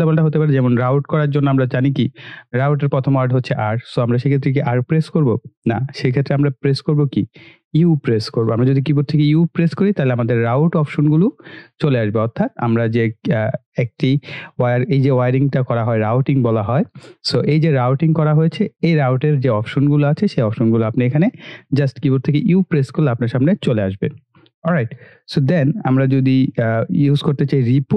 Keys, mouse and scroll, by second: 11.5 typing, 21.5 click, 22.4 u, 24.9 click.